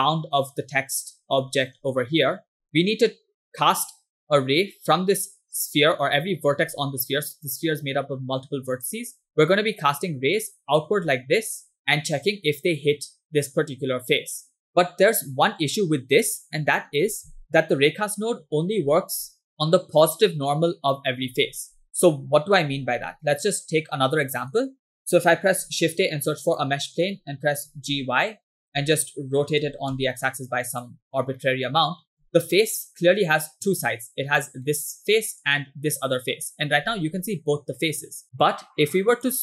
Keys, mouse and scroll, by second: 1.5 click, 2.4 click, 5.2 click, 5.8 click, 6.5 click, 7.3 click, 8.1 click, 9.2 click, 10.0-11.0 drag, 11.6 click, 11.8 click, 21.5-24.3 ctrl+drag, 25.6 shift+a, 27.7 g, 29.7 r, 31.4 shift+middle click, 32.6 middle click, 32.9 scroll up 2, 34.7 middle click, 36.3 shift+middle click, 37.9 shift+middle click, 39.2-39.4 drag.